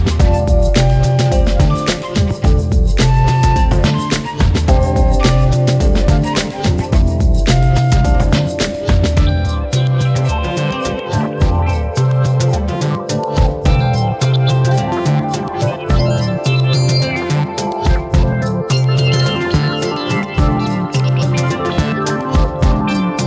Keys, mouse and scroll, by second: 0.5 drag, 1.8 click, 2.0 right click, 2.6 click, 3.3-5.2 shift+middle drag, 5.9-6.8 drag, 6.8-7.2 scroll down 1, 7.2 KP_1, 7.6 click, 8.4 Tab, 8.8 s, 9.6-10.0 scroll up 4, 10.0 shift+middle click, 10.5 s, 11.4 KP_7, 12.2 s, 13.6 scroll up 2, 13.9 shift+middle click, 14.1 scroll up 1, 14.3 shift+middle click, 15.2 ctrl+r, 16.6 ctrl+r, 18.5 click, 18.7 click, 19.7-20.7 drag, 21.0 s.